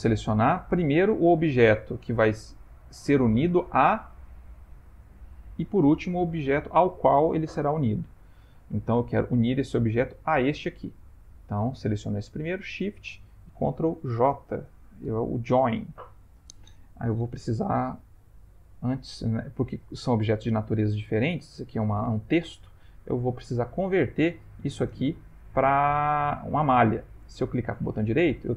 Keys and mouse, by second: 0.6 click, 2.7 g, 5.4 shift+click, 9.1 click, 10.2 click, 11.1 click, 12.5 shift+click, 13.2 shift+click, 14.1 ctrl+j, 17.8 click, 18.7 click, 19.6 click, 20.1 click, 20.6 click, 23.2 right click, 25.9 right click.